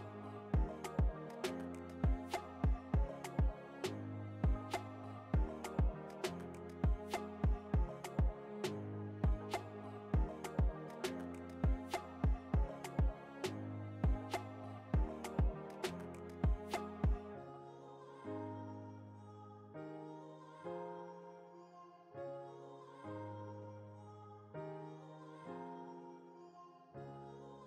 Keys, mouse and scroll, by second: 3.9-8.2 drag, 11.0-18.5 drag, 19.3 alt+scroll down 1, 19.7-27.6 drag, 23.1 typing.